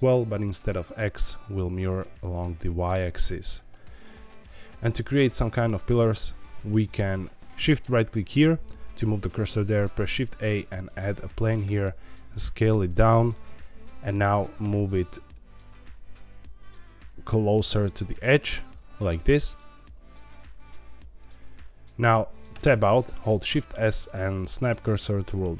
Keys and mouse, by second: 0.8 click, 2.2 click, 2.8-4.4 middle drag, 5.0 shift+middle click, 5.4 middle click, 10.0 shift+a, 11.3 Tab, 11.6 s, 12.9 click, 15.0 shift+z, 18.6 click, 22.5 Tab, 23.4 shift+s.